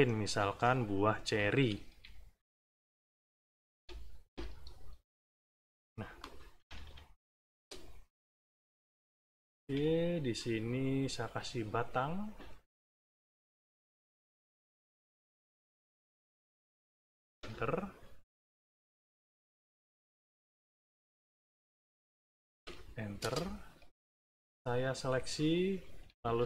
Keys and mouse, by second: 0.6 middle click, 1.8 e, 2.5-3.8 ctrl+drag, 4.3-5.7 ctrl+drag, 5.8 ctrl+middle click, 6.5 ctrl+=, 7.0 middle click, 8.1 click, 9.6 b, 10.8 click, 11.7-13.3 drag, 13.5 shift+click, 14.3-15.5 drag, 16.1 click, 17.3 Return, 18.4 click, 19.3-20.8 drag, 21.5 click, 22.6 Return, 23.2 space, 24.0 shift+click, 25.0 shift+click, 25.7 shift+click.